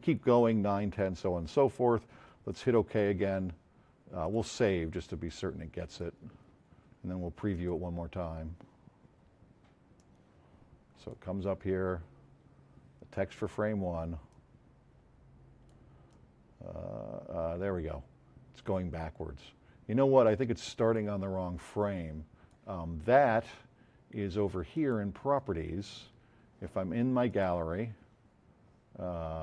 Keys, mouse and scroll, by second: 4.2 click, 5.9 click, 7.5 click, 9.9 click, 14.3-15.7 drag.